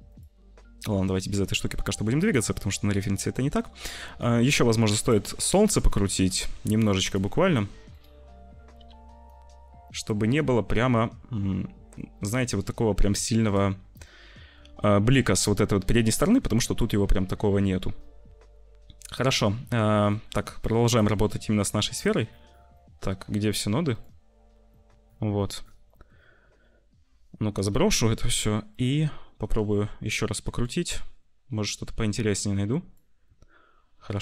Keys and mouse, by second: 0.0 click, 4.9 click, 5.9 shift+middle click, 8.8 r, 14.1 shift+middle click, 16.3 middle click, 17.5 shift+middle click, 18.0-19.0 middle drag, 20.9 click, 22.8 click, 24.6 click, 26.0 click, 27.5 BackSpace, 28.8-29.8 drag, 30.3 ctrl+z, 31.5-33.0 drag.